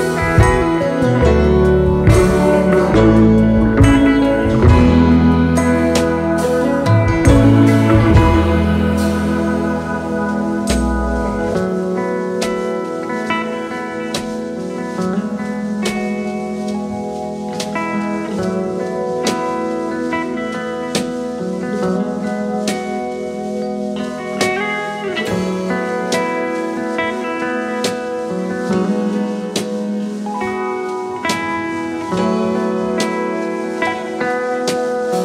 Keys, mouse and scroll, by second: 4.1 double click, 6.0 right click, 16.2 alt+shift+click, 19.0 typing, 21.1 alt+scroll up 1, 21.5 space, 33.1 double click, 33.6 alt+scroll down 1.